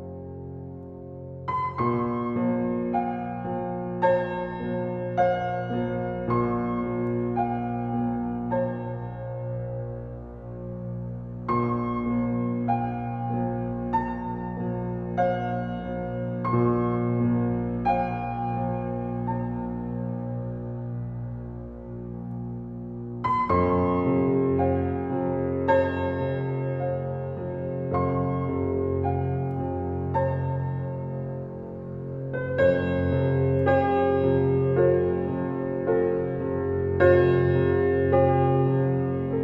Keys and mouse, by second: 1.4 click, 3.1-3.6 typing, 4.9-7.4 drag, 7.2 ctrl+s, 9.7 click, 9.8 middle click, 12.6-14.1 drag, 15.0-15.4 typing, 16.8 click, 17.8 click, 19.1-20.4 drag, 20.4-21.3 typing, 22.6-24.3 drag, 24.9 click, 25.1 typing, 26.8-28.4 alt+drag, 29.2 click, 30.3-32.3 drag, 31.0 typing, 32.3 typing, 33.8-35.5 drag, 34.7-35.6 typing, 35.5-37.5 alt+middle drag, 37.5-39.4 alt+drag.